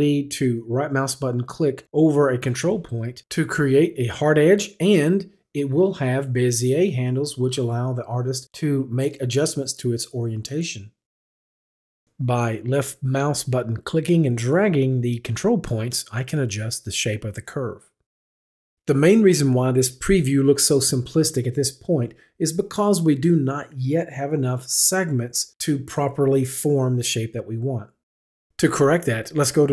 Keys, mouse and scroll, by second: 1.6 click, 1.6 right click, 4.0 click, 5.6 click, 6.3 click, 11.1 click, 14.8 click, 15.6 click, 17.7 click, 18.4 click, 20.8 click.